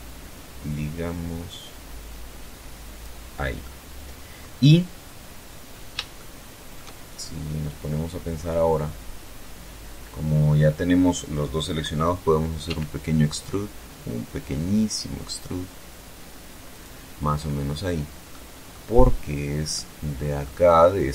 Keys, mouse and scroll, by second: 2.0 middle click, 3.9-4.3 scroll up 2, 4.5-5.3 shift+middle drag, 5.6 shift+scroll down 3, 6.9 scroll up 2, 7.7 scroll down 2, 11.0 e, 15.1 click, 16.0-16.4 scroll up 2, 16.7-17.2 middle drag, 17.3 scroll down 1, 18.1-18.9 middle drag, 19.1 scroll up 1, 20.5 right click.